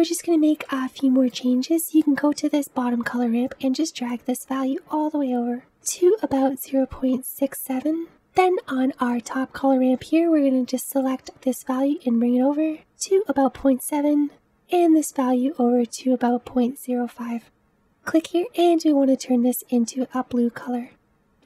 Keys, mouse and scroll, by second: 0.4-4.2 scroll up 1, 4.2-16.6 drag, 20.9-21.4 scroll up 1.